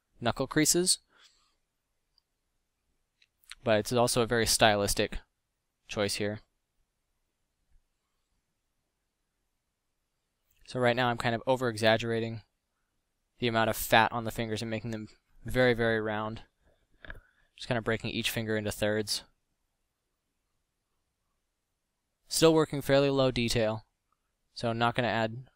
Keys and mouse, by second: 14.8 f, 19.6 f, 23.5 f, 24.5 f.